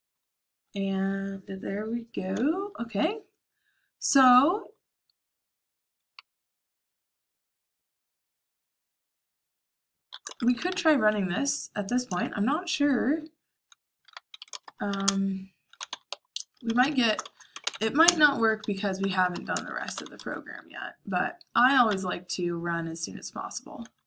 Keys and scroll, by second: 0.0-0.1 typing, 2.2-4.6 typing, 6.1 j, 6.6 j, 10.0-11.1 typing, 12.0 Return, 13.7-20.1 typing.